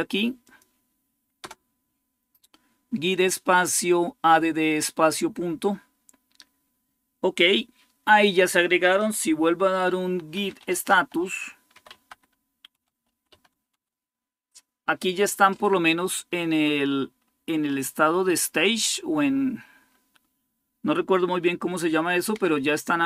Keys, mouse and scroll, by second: 9.9-13.6 typing, 16.4-17.0 scroll up 1, 16.4-17.0 typing.